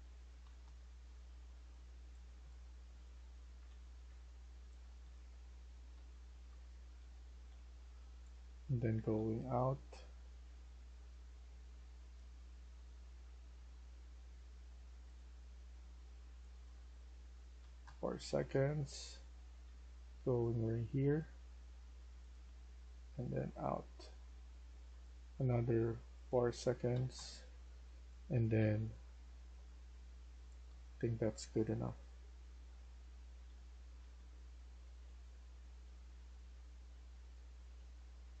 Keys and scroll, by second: 0.3-10.3 typing, 0.5 Return, 11.4 w, 12.1 w, 12.8 s, 13.2 s, 14.7-15.4 typing, 17.4-19.6 typing, 22.1-23.5 typing, 26.8-32.3 typing, 33.3-35.8 typing, 36.9-38.1 typing.